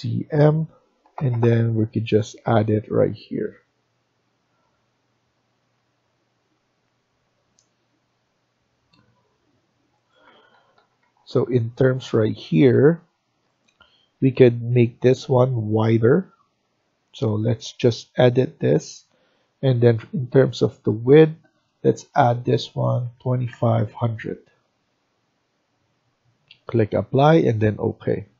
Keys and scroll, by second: 0.0-0.2 typing, 10.2 Escape, 10.5 Escape, 10.6 Escape, 10.9 Escape, 22.7-23.9 typing, 28.2 Escape.